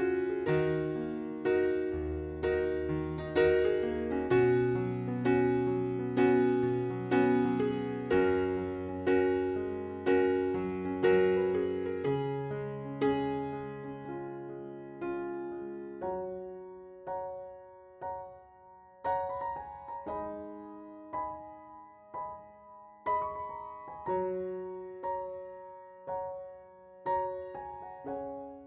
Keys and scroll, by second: 2.2 alt+r, 2.7 Delete, 4.2 alt+r, 5.3 alt+r, 7.7 alt+r, 8.4 Delete, 9.9 alt+r, 10.2 Delete, 11.0 alt+r, 11.3 Delete, 12.2 ctrl+z, 12.8 alt+r, 13.6 Delete, 15.4 ctrl+i, 15.8 Delete, 23.9 alt+q, 25.7 alt+r, 26.0 Delete, 27.2 alt+r, 27.5 Delete, 28.2 Delete.